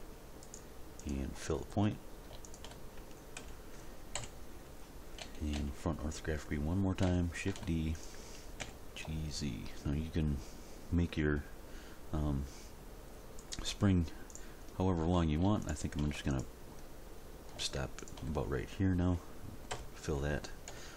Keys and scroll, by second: 3.4 f, 4.2 End, 5.2 a, 7.5 shift+d, 8.6 g, 9.0 z, 19.7 f, 20.7 End.